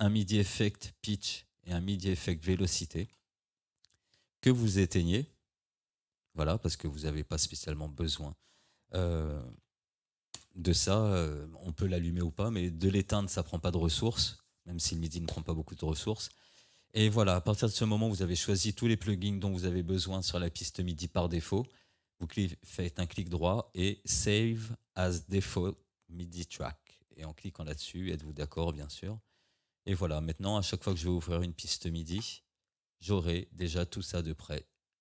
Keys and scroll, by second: 9.4 1, 10.4 Return.